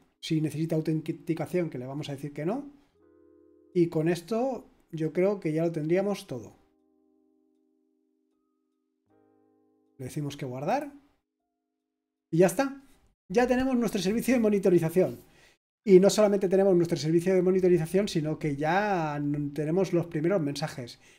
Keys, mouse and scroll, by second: 0.3-0.6 scroll down 2, 1.7-3.5 scroll up 2, 3.5-7.4 scroll down 4, 7.4-8.0 scroll up 2, 8.0-9.4 scroll up 1, 9.4-10.6 scroll down 2, 10.6 click, 11.0 click, 12.0-17.2 scroll up 1, 17.2-17.8 scroll down 1, 17.8-19.9 scroll down 1, 19.9-21.1 scroll down 1.